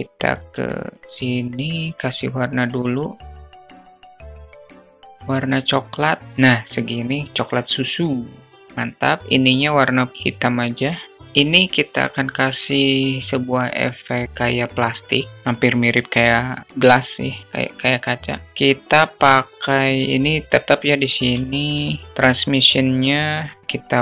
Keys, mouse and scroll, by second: 0.4 click, 1.5 click.